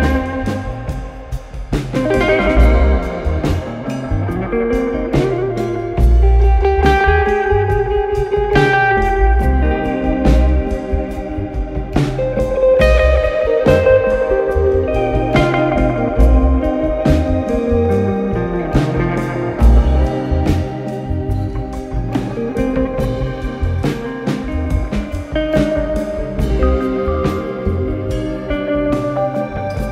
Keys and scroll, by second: 2.2-3.7 typing, 9.4 F1, 10.2 ,, 17.4-18.4 typing.